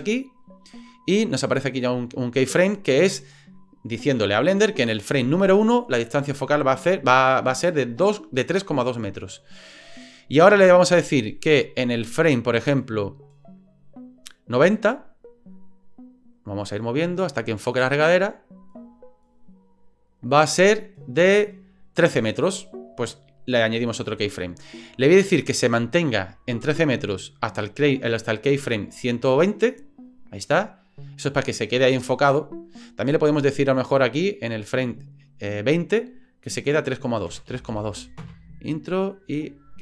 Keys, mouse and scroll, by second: 0.4 click, 11.6-15.2 drag, 16.3-21.6 drag, 24.0 click, 25.3-27.6 drag, 30.1 click, 34.4 click, 36.4-38.8 drag.